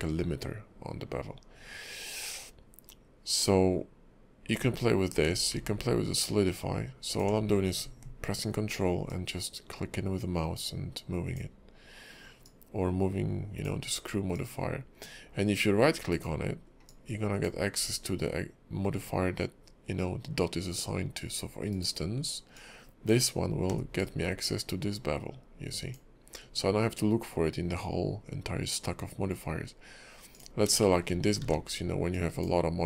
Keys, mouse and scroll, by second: 5.3 scroll down 2, 6.1 ctrl+click, 9.1 ctrl+click, 12.4 ctrl+click, 14.3 ctrl+click, 16.1 ctrl+right click, 21.7 ctrl+right click, 30.3 click, 30.8 shift+middle click, 31.1 scroll down 3, 31.4 ctrl+`.